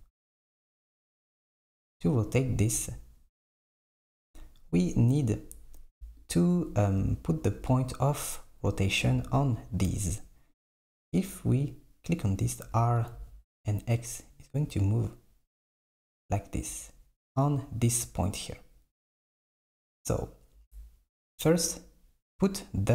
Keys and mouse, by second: 1.8 click, 6.3 click, 9.4 click, 10.6 click, 12.7 r, 19.2 z, 20.1-22.9 right drag.